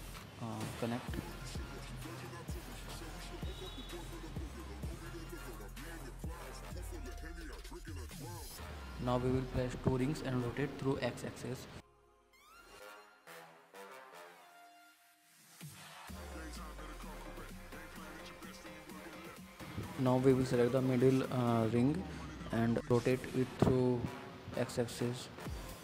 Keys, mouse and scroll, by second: 3.8 middle click, 4.2 click, 4.5 scroll up 2, 4.7-6.2 middle drag, 7.2 click, 7.5 scroll down 1, 7.7-8.7 middle drag, 8.7 alt+click, 9.0 alt+click, 9.2 alt+shift+click, 9.7-10.7 middle drag, 10.7 scroll down 4, 10.9 middle click, 11.1-12.0 scroll up 1, 12.0 r, 16.3 middle click, 16.6-17.1 scroll up 3, 17.1-18.4 middle drag, 18.4 scroll down 2, 18.6 middle click, 18.9 scroll up 1, 19.1-20.6 middle drag, 20.6 click, 20.8-22.3 middle drag, 23.0 click, 24.1 alt+click, 24.3 middle click, 25.2 r.